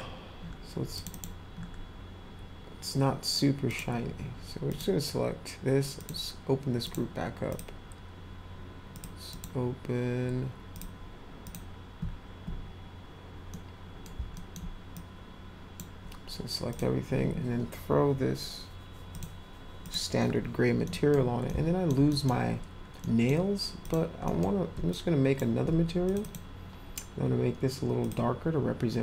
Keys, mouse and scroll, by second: 0.9 click, 1.1 click, 3.7 click, 4.7 click, 6.0 click, 6.8 click, 7.5 click, 8.9 click, 9.3 click, 9.7 scroll up 2, 10.7 click, 11.4 click, 13.5-14.0 middle drag, 14.3 alt+middle drag, 14.9-15.7 drag, 16.7 click, 19.1 click, 19.8 click, 20.8 middle click, 21.5 alt+middle click, 22.1 middle click, 23.0 middle click, 23.8 click, 24.2 middle drag, 24.9 shift+click, 26.1 click, 26.2 click, 28.0 click.